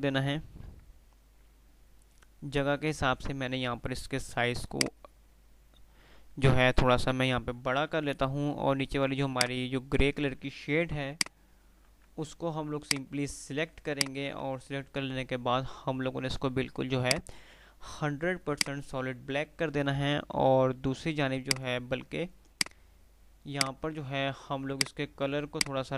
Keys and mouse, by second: 4.8-6.8 drag, 11.1 F2, 11.4 F2, 11.4 click, 11.8 2, 13.0 click, 14.1 ctrl+click, 14.3-15.1 typing, 17.1 click, 19.6 F3, 21.7 click, 22.1 F2, 23.7 click, 25.7 ctrl+click.